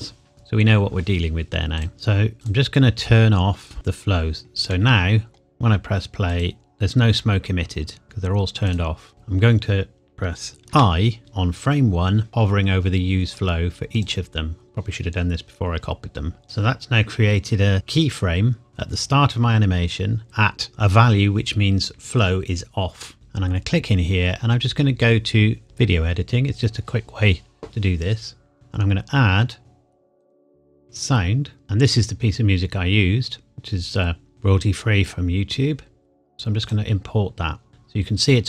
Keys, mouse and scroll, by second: 1.7 click, 4.7 middle click, 6.3 click, 9.1 middle click, 13.9 click, 18.7-20.2 scroll down 1, 23.1 click, 25.6 click, 28.5 click, 30.2 click, 36.7 click.